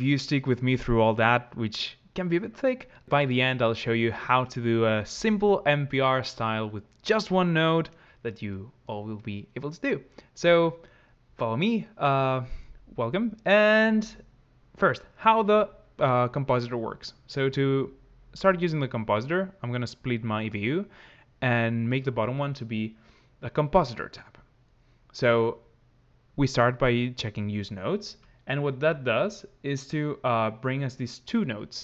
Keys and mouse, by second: 18.8-21.5 drag, 27.0 click, 29.2 ctrl+click.